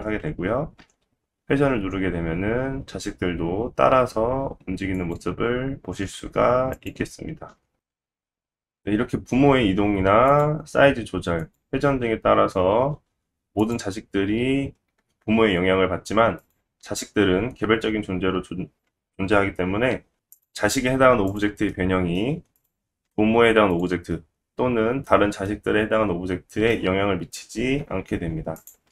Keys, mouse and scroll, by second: 0.8 r, 6.7 click, 7.4 click, 7.5 ctrl+z, 8.2 ctrl+z, 9.0 g, 10.7 s, 11.8 r, 16.4 click, 16.8 s, 19.5 g, 19.8-21.8 middle drag, 21.8 click, 22.1 g, 24.9 s, 26.2 g, 27.2 middle click, 28.0 click, 28.1-28.9 middle drag, 28.5 g.